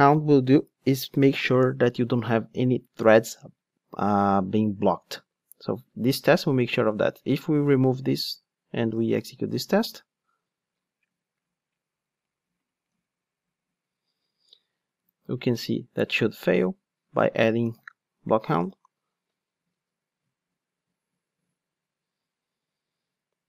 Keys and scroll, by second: 7.8 super+/, 9.1 ctrl+shift+d, 17.6 super+/, 18.6 ctrl+shift+d.